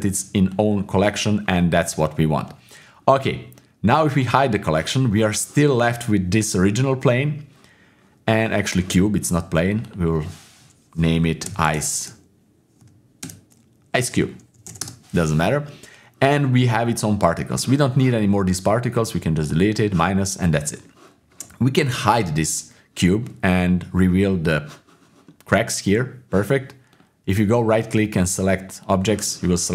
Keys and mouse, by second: 0.5 click, 1.6-4.1 middle drag, 4.4-9.7 drag, 9.8-14.8 drag, 22.1 click, 24.4 click, 25.3 middle click, 26.9-28.9 right drag.